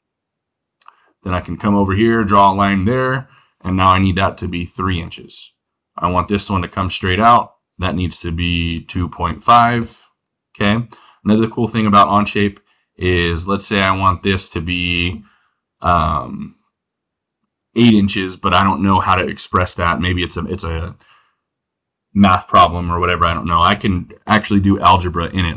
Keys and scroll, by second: 9.0 -, 9.2 5.